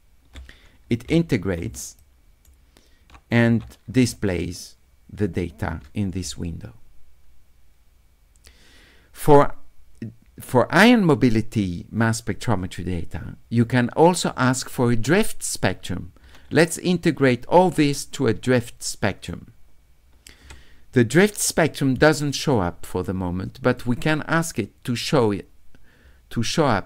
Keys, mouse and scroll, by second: 2.0 shift+right click, 17.3 d, 17.7-19.3 right drag, 23.7 click.